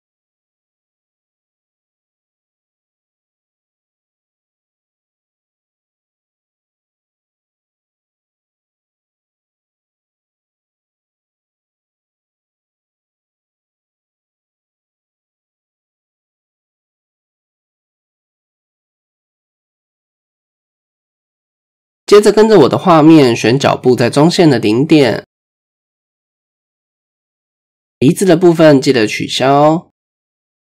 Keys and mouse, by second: 0.2 ctrl+z, 1.8 KP_3, 3.4-5.2 drag, 5.7-6.3 middle drag, 6.7 click, 7.2 KP_3, 7.4 KP_3, 8.7-11.1 drag, 11.7 middle click, 12.7 click, 13.3 click, 14.2 KP_1, 15.0 Tab, 15.8 shift+drag, 16.3 drag, 17.1 shift+drag, 18.3 Tab, 19.5 KP_3, 22.1 shift+middle click, 22.7-23.2 drag, 23.8-25.0 middle drag, 25.2-25.6 shift+drag, 26.3 click, 29.8-30.2 middle drag, 30.4-30.7 right drag.